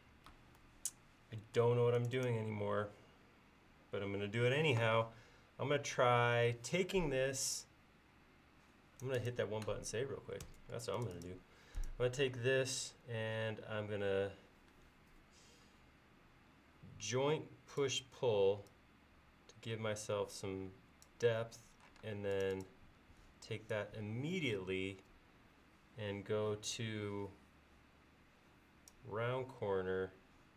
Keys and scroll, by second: 10.5 ctrl+s, 22.1 space.